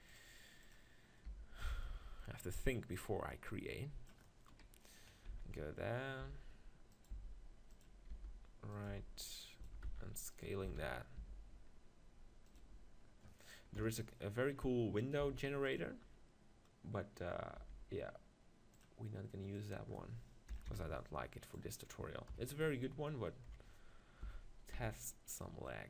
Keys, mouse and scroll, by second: 0.0-1.6 drag, 1.4 g, 1.6 middle click, 1.7-4.7 drag, 4.7 KP_3, 5.1-7.0 middle drag, 5.3 z, 6.2 g, 7.0-10.7 drag, 7.2 s, 8.2 g, 8.9 s, 9.7 s, 10.7 s, 12.5-14.4 drag, 13.8 KP_7, 14.4-15.8 middle drag, 15.2 g, 15.8-17.6 drag, 17.6 r, 18.8-21.4 drag, 22.3 KP_1, 23.5 KP_7, 24.2 s.